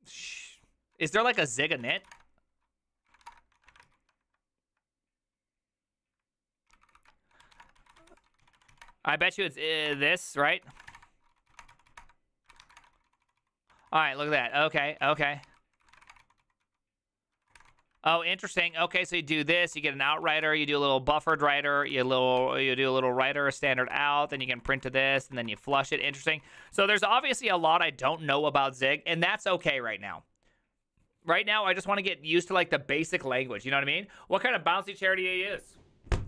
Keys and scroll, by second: 0.7-3.7 typing, 3.9 ctrl+u, 6.7 ctrl+c, 6.9 ctrl+c, 7.0 ctrl+c, 7.1-27.1 typing.